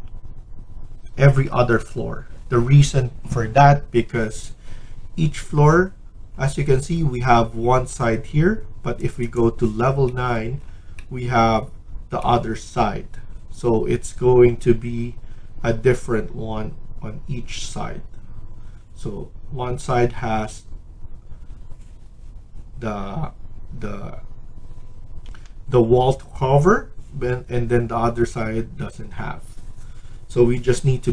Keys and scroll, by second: 25.2 F1.